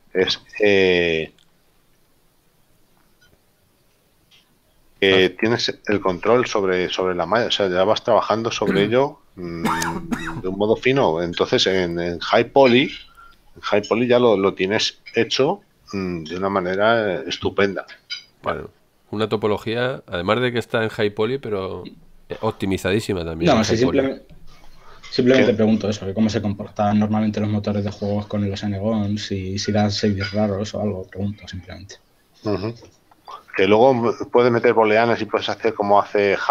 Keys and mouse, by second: 1.6 shift+middle click, 3.9 shift+middle click, 28.7 shift+middle click, 32.7 shift+middle click.